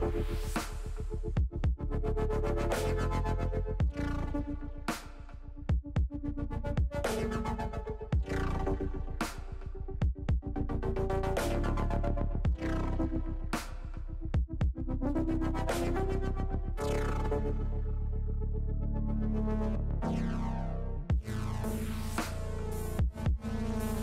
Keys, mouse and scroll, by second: 2.2 shift+a, 5.1 shift+a, 12.4 KP_1, 16.4 shift+middle click, 19.7 click, 20.9 click, 22.8 shift+middle click.